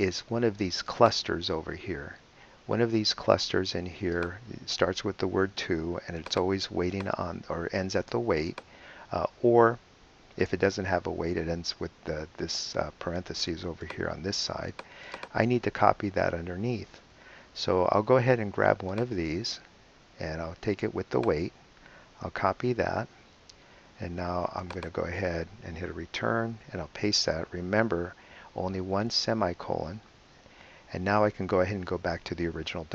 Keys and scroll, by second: 22.5 super+c, 26.2 Return, 27.2 super+v.